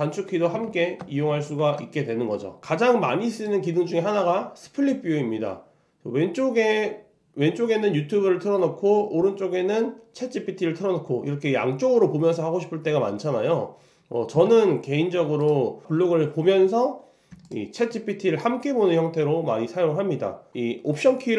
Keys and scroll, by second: 0.7 super+1, 1.0 super+2, 1.3 super+3.